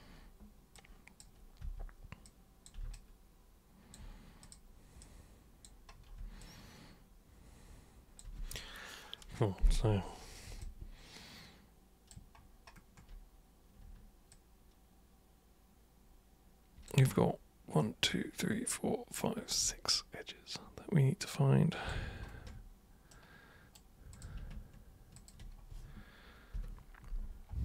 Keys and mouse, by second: 0.7 super+click, 1.6 super+w, 2.3 super+click, 3.0-3.9 alt+super+drag, 4.5 super+click, 5.0 super+click, 6.4-8.2 alt+super+drag, 10.6-12.1 alt+super+drag, 14.3-16.9 alt+super+drag, 20.0-21.9 alt+super+drag, 23.1 super+right click, 24.1 super+click, 25.2 ctrl+shift+super+click.